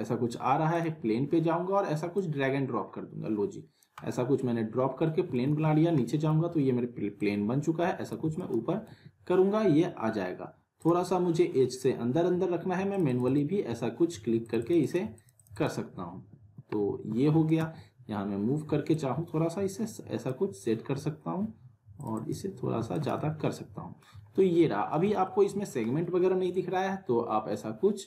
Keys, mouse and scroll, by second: 0.7-4.3 drag, 3.9 right click, 5.3 alt+w, 6.0 alt+middle click, 7.2-8.1 click, 8.2 alt+w, 8.4 alt+right click, 8.8 z, 10.8 click, 16.1 w, 17.1 w, 17.5 right click, 17.5 w, 18.9-20.5 drag, 22.8 alt+w, 22.9 alt+right click, 23.5-24.2 alt+middle click, 24.4-24.8 scroll up 1, 24.9 z, 25.2-25.9 alt+middle drag, 26.7 F3.